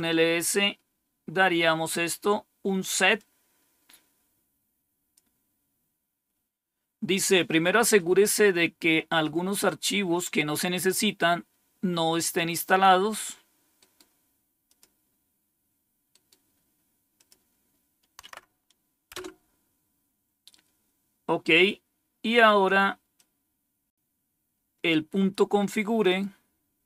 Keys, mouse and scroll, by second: 3.1-5.1 drag, 13.7 right click, 14.6 click, 16.0 right click, 16.8 right click, 17.1 click, 18.1 Right, 19.0 Return, 21.8-22.4 scroll down 2, 23.1-24.8 drag, 25.9 right click.